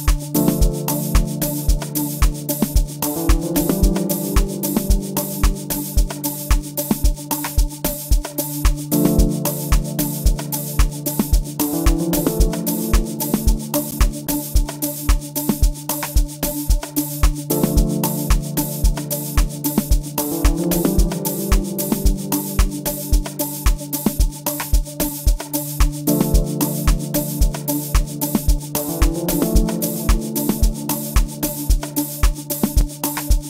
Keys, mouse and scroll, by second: 9.2 space, 9.5 click.